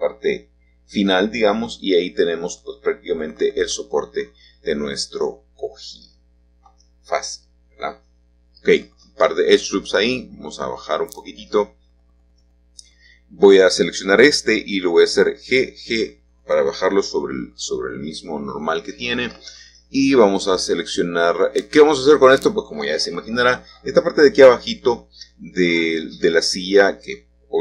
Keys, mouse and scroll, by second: 0.2 shift+middle click, 1.4 middle click, 6.0-6.7 scroll up 1, 6.7 click, 7.4 click, 9.0 g, 11.8-12.9 drag, 12.9 a, 13.1 a, 14.0-16.4 alt+shift+drag, 17.6-19.1 drag, 19.1 middle click, 23.1 click, 24.1 3, 25.0 click, 26.0 e, 26.7-27.6 drag.